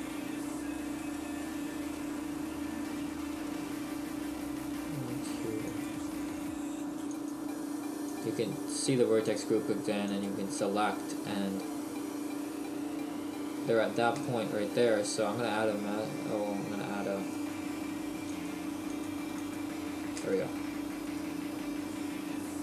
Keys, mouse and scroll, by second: 1.0 right click, 1.5 Tab, 1.9 shift+middle click, 3.3 right click, 3.8 Tab, 5.7 click, 11.5 middle click, 17.3 right click, 18.4 click, 19.3 click, 20.2 click, 20.2 space, 22.2 Tab.